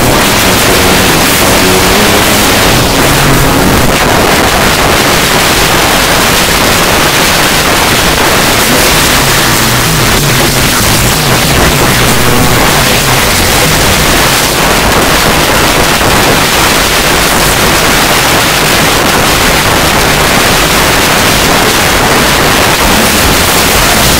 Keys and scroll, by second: 3.7 Page_Down, 14.4 Page_Down.